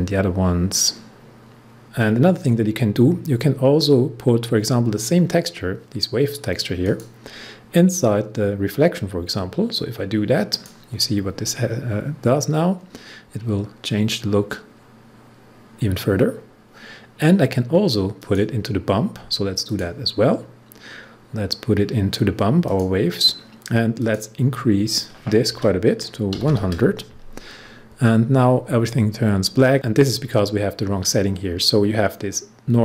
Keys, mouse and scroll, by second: 6.8 click, 10.5 click, 13.0 scroll up 1, 15.8 scroll down 1, 18.1 click, 22.6 click, 25.5-26.9 typing.